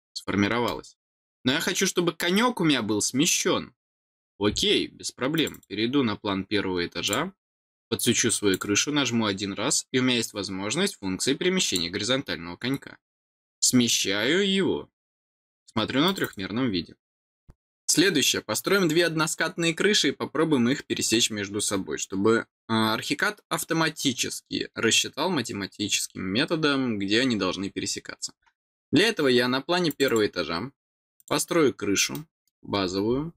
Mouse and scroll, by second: 1.1-1.6 scroll down 4, 5.3 click, 5.5 click, 7.0 click, 8.5 click, 11.6 click, 13.5 click, 16.0 click, 16.2 click, 29.9 click, 30.0 click, 31.2 click, 32.1 middle click, 32.8-33.3 scroll down 3.